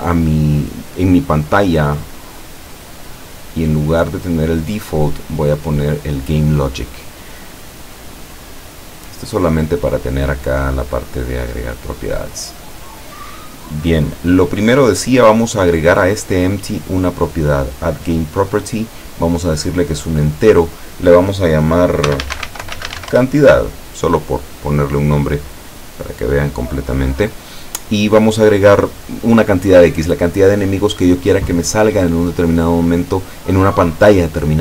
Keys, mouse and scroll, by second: 4.2 click, 6.0 click, 8.3-9.6 middle drag, 9.7-10.1 scroll up 1, 11.7-12.1 scroll up 1, 12.1 scroll down 1, 12.6-13.9 middle drag, 16.9 click, 19.0 click, 20.0 click, 20.7 click, 22.1-22.8 typing, 23.2 Return, 25.7-27.3 drag, 28.0 click.